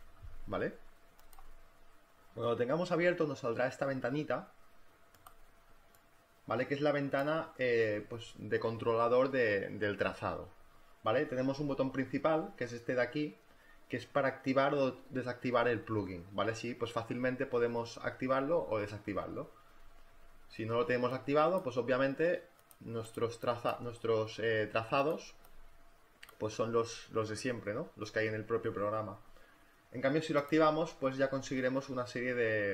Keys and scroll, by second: 14.0 space, 31.5 space.